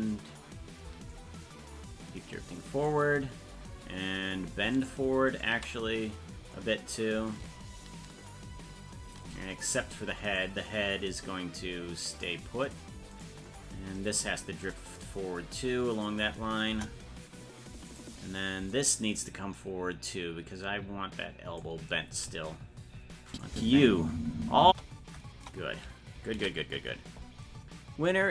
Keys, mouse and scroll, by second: 1.1-2.9 shift+drag, 4.8 shift+right click, 7.3-9.2 shift+drag, 9.8 right click, 10.3-12.7 drag, 13.2 right click, 14.7-16.0 drag, 16.7 KP_0, 17.9 right click, 20.0-21.6 drag, 23.3 click, 23.5 space, 25.3 KP_0, 26.7 ctrl+s.